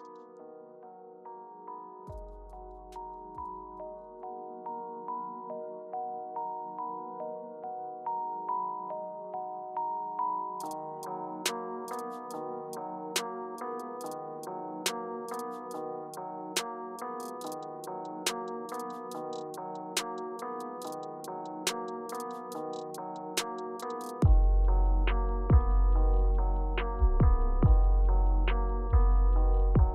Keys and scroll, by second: 14.9-15.8 typing, 17.5 typing, 25.9 space, 27.6 space.